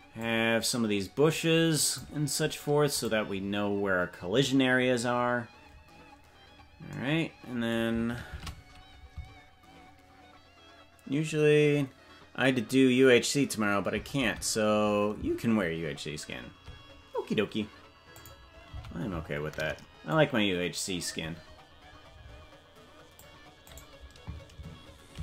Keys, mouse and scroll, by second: 8.2 shift+`.